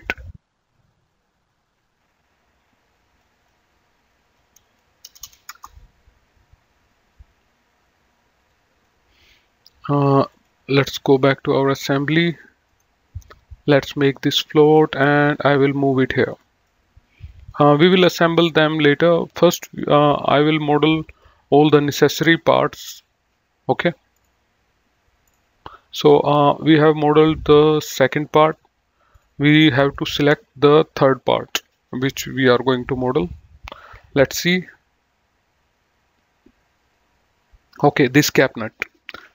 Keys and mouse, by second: 2.6 click, 4.8 BackSpace, 5.2 Return, 8.5 click, 10.3 click, 11.2 middle click, 12.5 right click, 13.8 click, 16.3 click, 16.6 middle click, 20.4 click, 32.8 click.